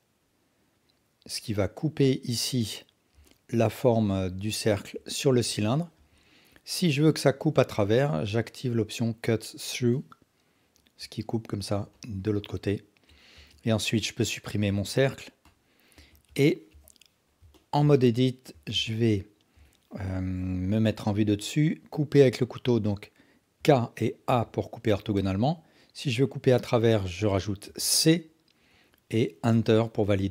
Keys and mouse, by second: 3.2-4.8 alt+drag, 6.0 KP_1, 9.9-10.9 alt+drag, 11.9-13.1 alt+drag, 13.3 Tab, 14.7 x, 16.0 Tab, 16.7 KP_1, 17.5 ctrl+alt+drag, 17.9-18.4 alt+shift+drag, 18.8-19.4 ctrl+alt+drag, 20.3 KP_7, 23.6 k.